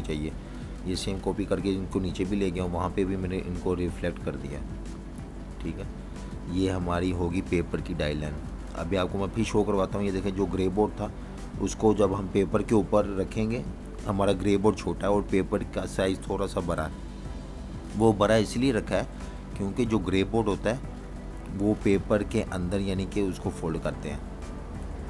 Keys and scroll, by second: 6.4 super+-, 6.5 super+-, 7.5 z, 8.5 typing, 10.3 alt+super+2, 17.8 space, 19.4 v, 20.6-22.9 typing.